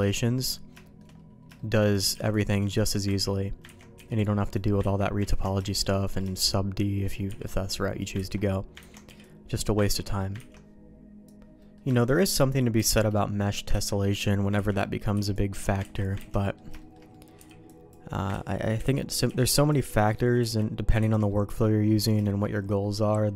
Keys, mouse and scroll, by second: 0.2 middle click, 0.8 shift+middle click, 1.6 shift+middle click, 2.1 b, 3.2 ctrl+q, 3.7 ctrl+x, 3.9 b, 4.8 ctrl+q, 5.2 ctrl+x, 5.6 shift+middle click, 5.9 middle click, 6.3 shift+middle click, 7.2 b, 8.2 ctrl+q, 8.8 ctrl+x, 9.1 b, 9.9 ctrl+q, 10.4 ctrl+x, 11.6 middle click, 12.0 shift+middle click, 12.7 b, 13.7 ctrl+q, 14.1 middle click, 14.5 ctrl+x, 14.8 middle click, 15.1 b, 15.8 ctrl+q, 16.2 ctrl+x, 16.4 middle click, 16.8 shift+middle click, 17.2 click, 17.4 b, 18.3 ctrl+q, 18.8 ctrl+x, 19.2 b, 20.4 ctrl+q, 21.0 ctrl+x, 21.3 middle click, 21.8 middle click, 22.2 shift+middle click, 22.8 middle click.